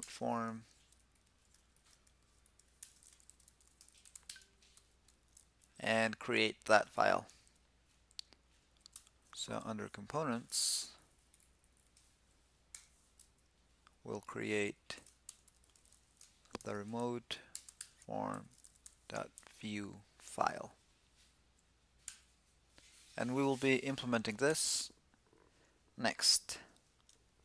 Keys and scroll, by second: 0.8 alt+shift+Left, 4.3 alt+Right, 4.9 alt+Right, 6.1 alt+BackSpace, 8.1 super+s, 12.2 alt+super+n.